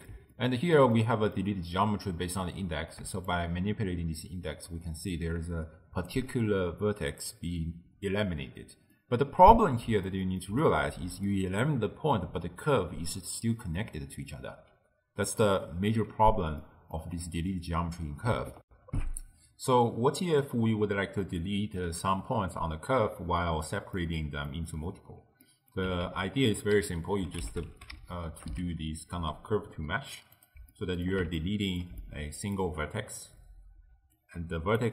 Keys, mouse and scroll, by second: 3.3-6.4 shift+drag, 9.0-13.7 middle drag, 16.7-18.7 middle drag, 18.7 n, 21.3-26.1 middle drag, 26.1 ctrl+a, 30.7-34.0 middle drag, 34.0 d, 34.2-34.8 drag, 34.8-34.9 d.